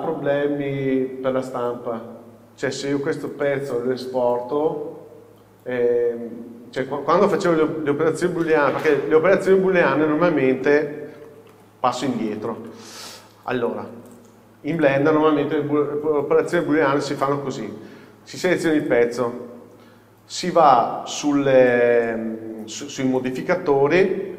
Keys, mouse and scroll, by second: 9.3-10.5 scroll up 1, 10.5-11.4 scroll down 1, 11.4 ctrl+z, 14.2-16.8 drag, 18.9 click, 23.2 click.